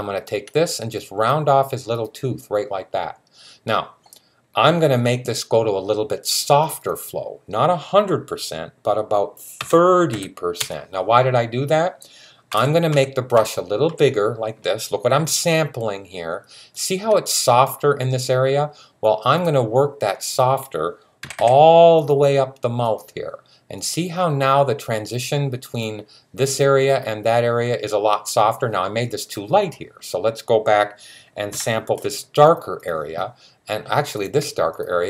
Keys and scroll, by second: 9.4-9.9 typing, 12.1-13.7 typing, 21.0 typing, 31.3 [.